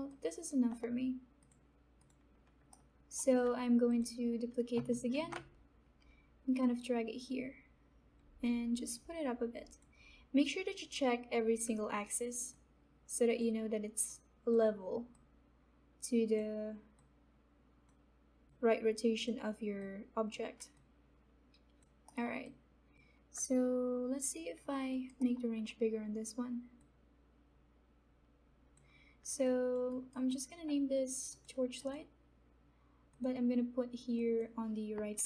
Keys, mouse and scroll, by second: 0.0-1.3 alt+drag, 2.7 middle click, 3.9 click, 5.1 ctrl+d, 6.6-20.7 drag, 20.7-22.0 alt+drag, 22.0 alt+middle click, 22.7-24.9 alt+drag, 24.9 alt+right click, 25.1 alt+middle click, 26.7-29.4 drag, 29.8 alt+right click, 30.2 alt+click, 31.2 click.